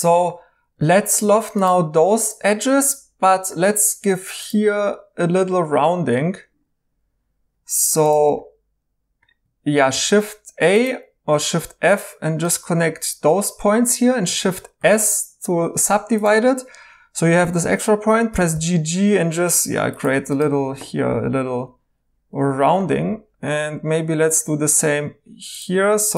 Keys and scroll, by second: 9.9 f, 14.8 s, 18.3 typing, 20.5 2, 22.4-23.6 typing.